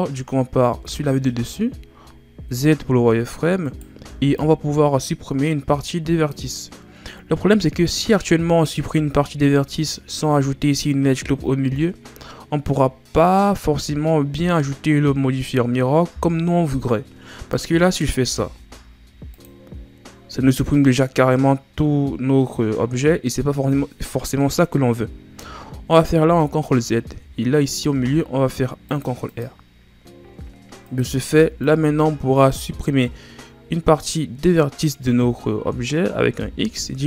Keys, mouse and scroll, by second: 0.8 KP_7, 2.4 z, 3.7 right click, 4.0 b, 7.1-8.6 scroll up 2, 8.6 scroll up 2, 18.2 x, 26.2 ctrl+z, 27.9 ctrl+r, 30.8 right click, 31.3 b, 36.3 x.